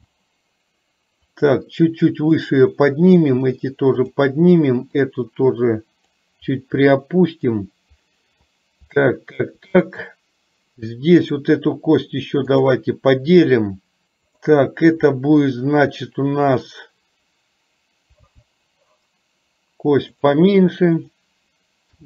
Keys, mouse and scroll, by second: 1.3-2.4 drag, 5.2-6.2 drag, 6.9 middle click, 9.1 shift+middle click, 14.4 click, 18.3 g.